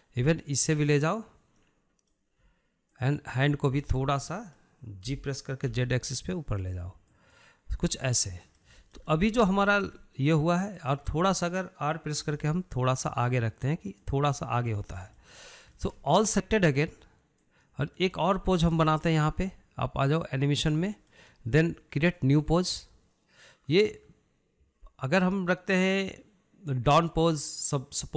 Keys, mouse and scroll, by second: 1.4 click, 2.4-3.8 middle drag, 3.8 shift+drag, 4.2-5.9 middle drag, 5.9 g, 8.5 scroll down 1, 8.7-10.3 middle drag, 10.3 scroll up 1, 10.5-11.7 shift+middle drag, 11.7 drag, 12.0-13.1 middle drag, 13.1 r, 15.4 scroll down 1, 15.6-17.1 middle drag, 17.1 click, 19.1-21.3 shift+middle drag, 21.3 click, 21.8-23.4 shift+middle drag, 23.4-26.5 drag.